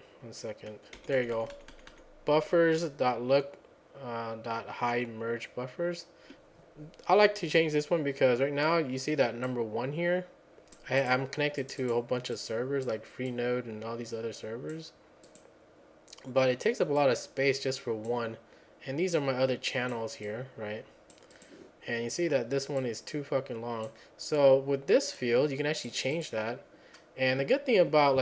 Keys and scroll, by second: 1.0 Up, 1.2 Up, 1.4 Up, 1.5 Up, 1.7 Up, 1.9 Up.